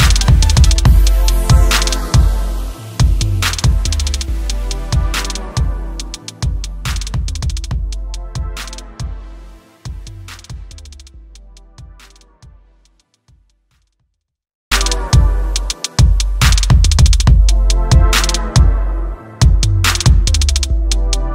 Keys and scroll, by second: 19.2 ctrl+b.